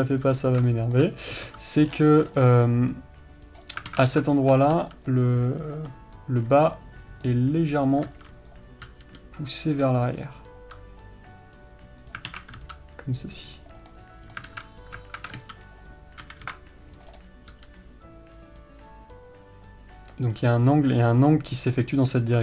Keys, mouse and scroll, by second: 4.7-7.6 middle drag, 14.3-22.4 middle drag.